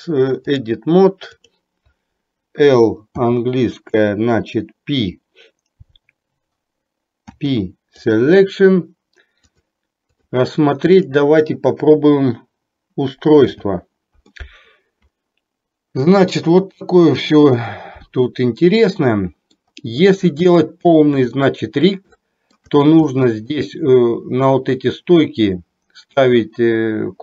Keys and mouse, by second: 1.6 click, 9.6-10.4 drag, 13.6 h, 14.4-19.6 middle drag, 20.7-21.2 shift+middle drag, 21.4-21.9 middle drag, 22.3-22.7 shift+middle drag, 23.2-23.6 middle drag.